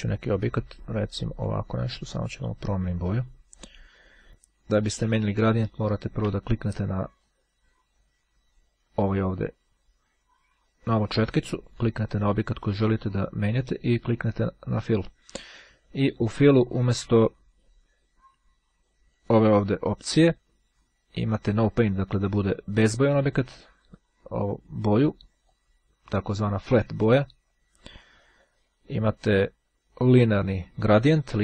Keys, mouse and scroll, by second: 1.4 click, 3.6 click, 4.6-5.7 drag, 7.4 click, 11.6 click, 14.8 click, 18.4-19.8 drag, 21.0-22.0 drag, 23.4 click, 25.6-28.5 drag, 29.5-30.8 drag.